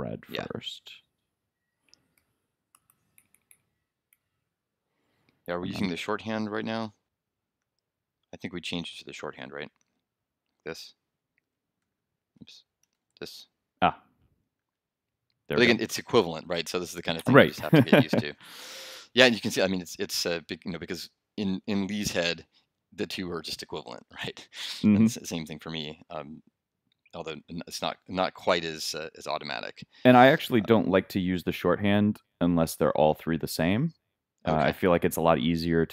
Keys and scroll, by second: 2.3 shift+3, 2.9 shift+f, 11.4 super+d, 11.8 super+f, 14.6 super+s.